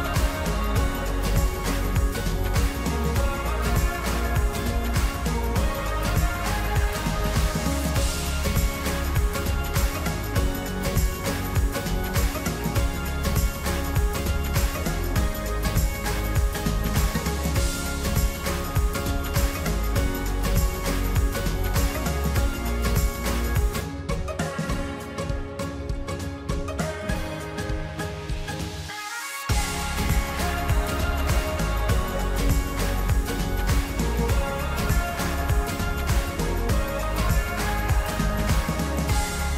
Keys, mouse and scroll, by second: 0.7-2.7 drag, 3.3 click, 12.7-15.2 shift+middle drag, 15.2 e, 16.9-19.0 drag, 19.3 click, 29.3 e, 30.9-33.0 drag, 34.0 click, 38.5 e.